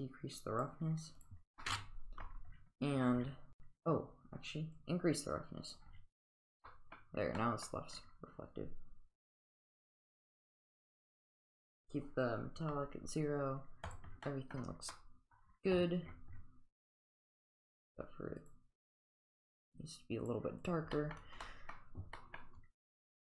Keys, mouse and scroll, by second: 1.2 click, 1.6-2.2 middle drag, 4.8 click, 6.4 click, 6.6-7.0 middle drag, 7.4 middle drag, 13.8 click, 14.2 middle drag, 14.9-15.3 middle drag, 16.9 click, 20.6 click, 20.9 middle drag, 21.4 middle click, 22.1 middle drag.